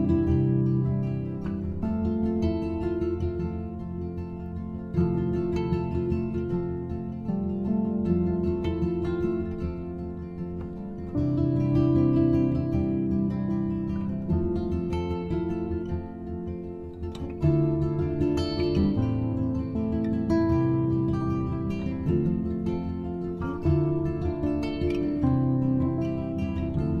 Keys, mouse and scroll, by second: 1.7-5.6 drag, 6.0-10.5 drag, 12.6-15.7 drag, 17.3-19.1 middle drag, 19.1-22.3 drag, 22.5-23.6 middle drag, 23.6-27.0 drag.